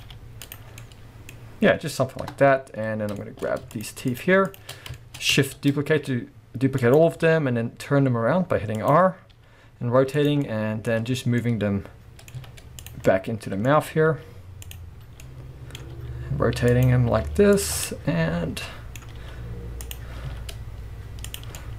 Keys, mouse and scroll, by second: 0.0 g, 0.5 click, 0.7 scroll down 1, 0.8-3.7 middle drag, 1.4-2.2 scroll up 1, 2.2 KP_0, 2.7 scroll up 2, 3.0 scroll down 2, 3.7 shift+click, 4.1 shift+click, 4.5 shift+click, 4.7 scroll down 2, 5.0-6.9 shift+middle drag, 5.6 shift+d, 6.9 click, 7.3 r, 8.9 click, 9.1 scroll up 2, 9.3 g, 10.3 click, 10.5-12.9 middle drag, 10.9-12.4 scroll up 2, 12.4 z, 13.0-14.7 middle drag, 13.7-14.1 scroll up 2, 14.1 g, 14.7 click, 15.2-16.8 middle drag, 15.9 r, 16.8 click, 17.2 g, 17.6 click, 17.8-20.0 middle drag, 19.2 r, 20.0 click, 20.2 z, 21.6-21.7 middle drag.